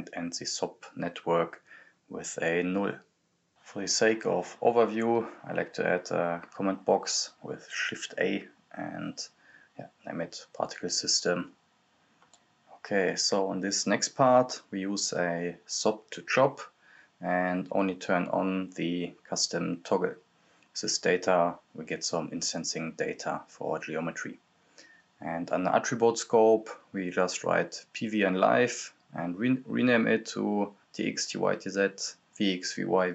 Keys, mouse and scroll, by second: 2.6-3.0 scroll down 1, 3.0 click, 4.1 shift+a, 5.4-7.4 typing, 8.0 right click, 8.9-11.6 drag, 13.0 click, 13.1-15.3 drag, 16.2 right click, 17.4 click, 18.3 click, 18.4-21.0 drag, 26.0-27.1 typing, 26.0 click, 27.4 click, 28.2-31.6 typing, 28.3 click, 32.0 Return, 32.0 click.